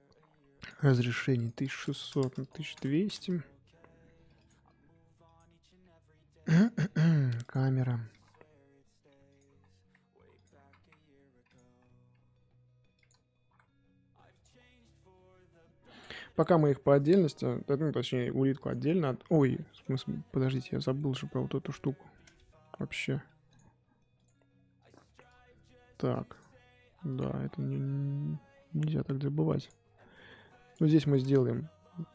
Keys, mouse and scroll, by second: 2.2 KP_0, 2.4 click, 3.1 KP_0, 4.5 click, 5.3 click, 17.6 g, 19.3 scroll up 2, 19.6 middle drag, 19.9 scroll up 2, 20.5 click, 20.7-24.2 shift+middle drag, 24.2 click, 24.5-25.0 scroll up 2, 25.0-27.1 shift+middle drag, 27.1 click, 27.4-30.7 middle drag, 30.7 click, 31.0 shift+middle click, 31.9 click.